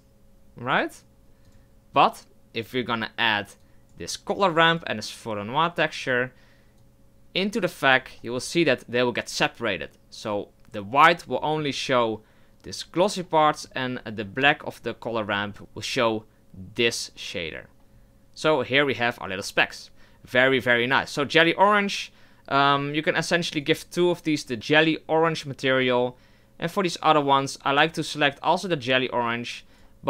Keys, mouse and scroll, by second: 1.5 click, 8.0 click, 23.1 scroll down 1, 23.5 right click, 24.5-27.8 drag, 27.8 right drag, 29.8-30.0 drag.